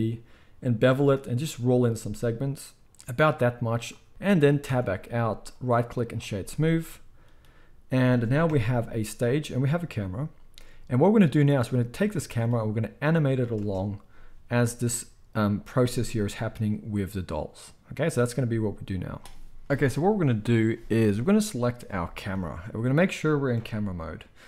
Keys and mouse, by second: 4.6 Tab, 6.4-14.9 middle drag, 8.5 KP_0, 13.6 space, 14.6 space, 14.9-21.6 drag, 19.7 ctrl+s, 20.4-24.4 middle drag, 20.4-21.6 right drag, 23.5 KP_0.